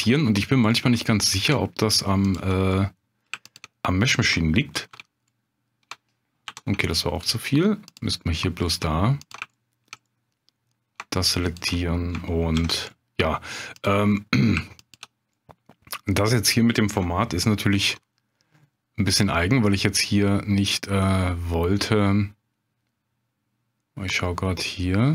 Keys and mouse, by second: 0.7 middle click, 2.3 ctrl+click, 2.7 middle click, 3.4 shift+click, 4.7 ctrl+x, 6.5 ctrl+z, 6.8 middle click, 8.2 middle click, 9.2 ctrl+click, 9.5 shift+middle click, 10.1 middle click, 11.5 ctrl+click, 12.5 ctrl+x, 12.9 middle click, 14.2 middle click, 14.9 shift+click, 15.4 middle click, 17.7 ctrl+b.